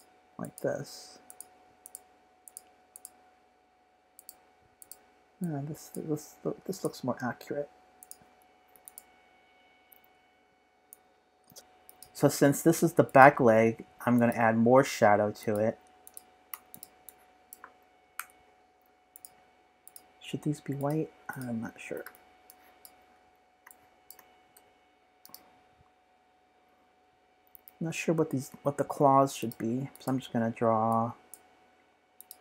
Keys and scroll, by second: 8.7 typing, 24.5 p, 27.5 super+z, 28.4 p.